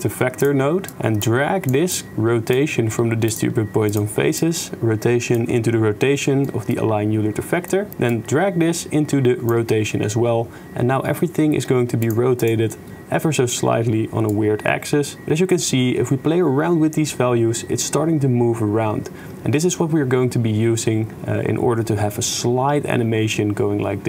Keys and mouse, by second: 1.2 click, 1.9-2.5 drag, 2.6 g, 3.9-5.4 drag, 6.5 click, 7.6 shift+drag, 7.9-9.5 shift+middle drag, 12.0 middle click, 12.4 middle click, 14.4 click, 14.8-16.7 middle drag, 16.7-19.2 drag, 19.2-21.5 right drag, 21.5-23.7 drag.